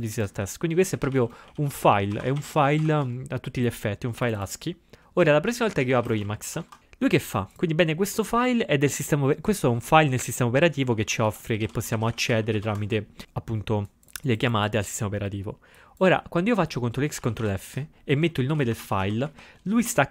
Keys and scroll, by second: 0.6-3.4 typing, 5.4-7.1 typing, 10.9-13.1 typing, 17.3 ctrl+x, 17.5 ctrl+f, 18.3-20.1 typing.